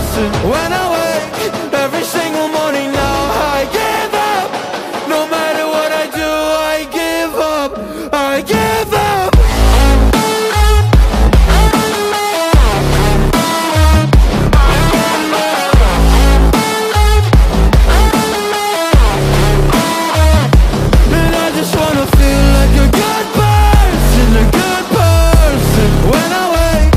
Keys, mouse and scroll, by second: 0.3-1.4 middle drag, 1.0 a, 2.1-2.4 alt+drag, 2.1-2.4 alt+middle drag, 2.1-2.4 alt+right drag, 2.4-2.8 drag, 2.4-2.8 middle drag, 2.4-2.8 right drag, 2.8 KP_7, 2.8 click, 2.8 middle click, 2.8-6.8 right drag, 5.0-6.8 drag, 5.0-6.8 middle drag, 6.2 Tab, 6.8 a, 7.3-8.6 drag, 7.3-8.6 middle drag, 7.3-8.6 right drag, 7.3 space, 8.9 Tab, 12.1 ctrl+a, 12.6-14.9 right drag, 14.0 middle click, 14.3 a, 14.4 alt+middle click, 14.9 middle click, 15.1 alt+right click, 15.4 Tab, 15.8 alt+middle click, 16.0 right click, 16.1-18.8 right drag, 16.1 a, 16.4 c, 18.8-24.9 alt+middle drag, 19.8 right click, 20.8-23.6 drag, 21.2-22.9 right drag, 24.0 Tab, 24.7-26.9 alt+drag, 24.7 alt+right drag, 25.5-26.9 alt+middle drag, 25.5-26.9 alt+right drag, 26.1 ctrl+KP_7.